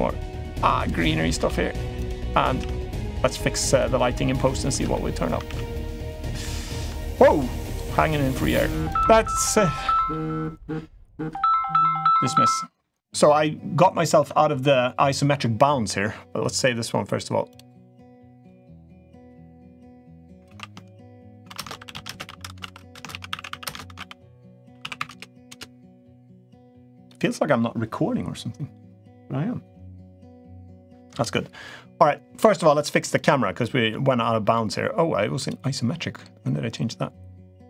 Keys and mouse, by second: 0.1 g, 0.7-1.8 middle drag, 1.2 shift+d, 1.9 middle drag, 2.4 shift+d, 3.8-4.1 middle drag, 4.7-5.1 middle drag, 6.2-6.6 middle drag, 6.9 g, 7.7-8.2 middle drag, 8.4 g, 14.0 Tab, 17.4-18.3 drag, 33.4 middle drag, 34.3 middle click, 35.2 click.